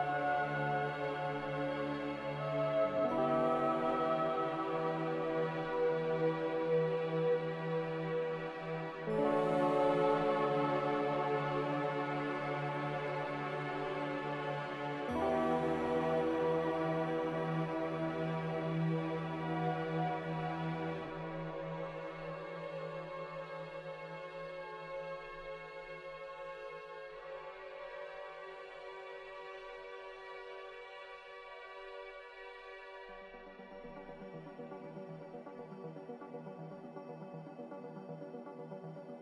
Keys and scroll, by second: 0.0-0.4 typing, 3.7-4.4 typing, 9.3 0, 10.0 a, 15.4 z, 19.2 typing, 19.7 Return, 26.1 x, 26.1 z, 28.8 typing, 29.2 Return, 35.2 z, 38.7 typing.